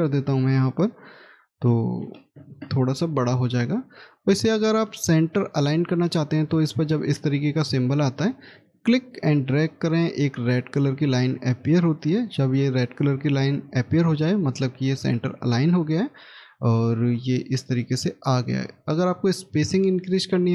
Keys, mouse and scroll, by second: 1.5 5, 1.9 0, 2.2 Return, 5.9 scroll up 1, 17.0 scroll up 1, 17.0 scroll down 1.